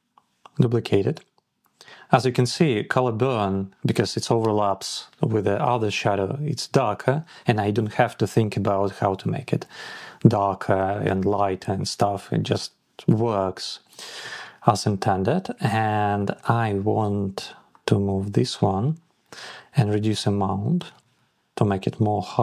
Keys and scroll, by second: 20.4 Down, 21.6 Up, 21.8 Down.